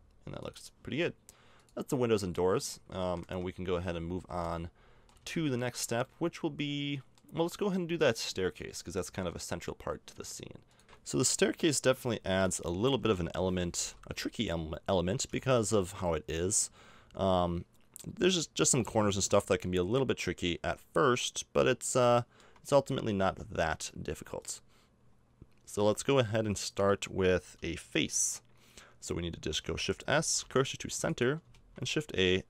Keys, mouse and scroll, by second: 0.4-1.7 drag, 2.9 a, 3.3 Tab, 3.8 z, 4.2 z, 5.2 a, 6.1 middle click, 10.8 z, 10.8 KP_0, 11.0-12.0 middle drag, 12.2-13.5 middle drag, 12.8 z, 13.8 a, 18.6-22.1 middle drag, 22.3 middle click, 22.4-24.4 middle drag, 24.4-25.5 right drag, 25.5 click, 26.2-28.2 middle drag, 26.6-28.2 drag, 28.2 right click, 30.1 shift+s, 31.5 shift+a.